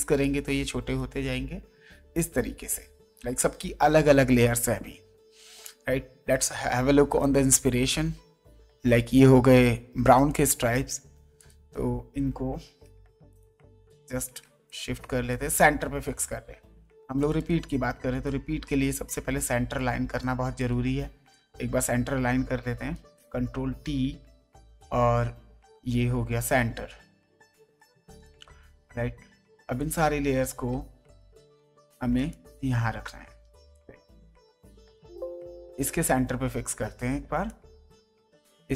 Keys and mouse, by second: 7.2 click, 10.2 click, 11.3 click, 13.3 shift+click, 14.6 shift+click, 17.2 click, 19.7 click, 24.5 alt+click, 26.4 click, 28.0 click, 29.1 ctrl+d, 29.7 click, 30.2 ctrl+d, 31.0 click, 32.3 shift+click, 34.7 click, 37.5 click.